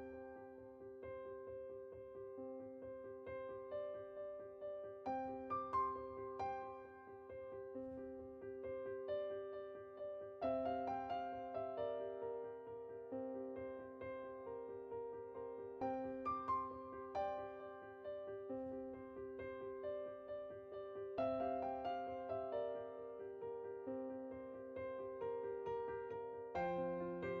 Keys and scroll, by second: 2.7 Tab.